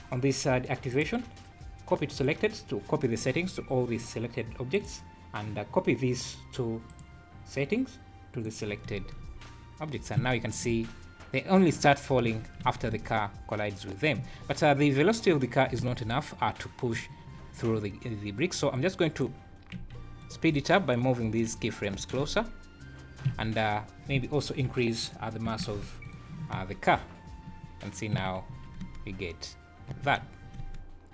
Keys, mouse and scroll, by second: 0.9 right click, 4.7 right click, 6.8 right click, 8.9 space, 10.3 Escape, 10.5 scroll down 5, 10.7 space, 12.3 Escape, 12.7 alt+a, 12.9 space, 14.2 Escape, 15.0 click, 15.8 space, 17.0 Escape, 18.8 click, 19.8 g, 20.6 click, 21.5 g, 22.2 space, 23.3 Escape, 25.0 click, 25.8 KP_0, 26.6 space, 28.2 Escape, 28.5 `, 28.8 space, 30.0 Escape, 30.2 `, 30.6 space.